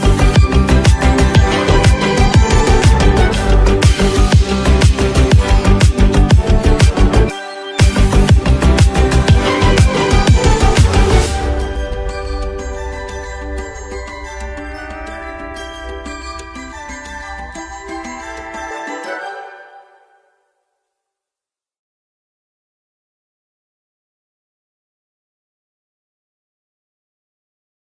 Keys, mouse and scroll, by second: 4.6-4.9 alt+scroll up 1, 5.1 space, 5.2 click, 5.6 space, 6.1 space, 9.8 click, 12.4 click, 14.3-18.4 typing, 21.9 click, 26.8 click.